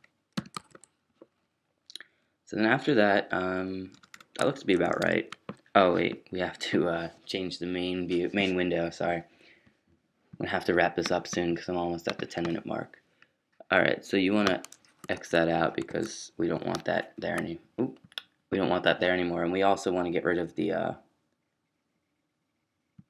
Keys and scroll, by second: 0.0-1.0 typing, 2.6-4.8 typing, 3.5 Down, 15.1 super+s, 15.8 super+q.